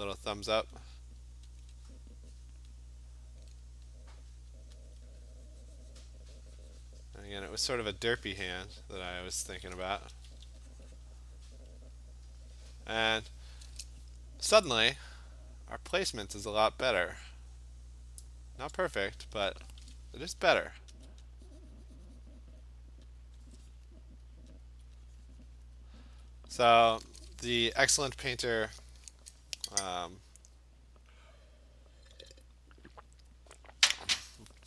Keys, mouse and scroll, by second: 1.6 alt+click, 2.7 click, 4.9 alt+click, 6.1 click, 7.2 click, 8.6 click, 9.1 click, 9.9 alt+click, 10.1 [, 10.4 [, 11.0 click, 11.6 click, 18.3 click, 18.7 ctrl+z, 21.1 alt+click, 22.6 click, 23.4 click, 23.6 alt+click, 24.7 alt+click, 25.7 click, 26.2 alt+click, 26.8 click.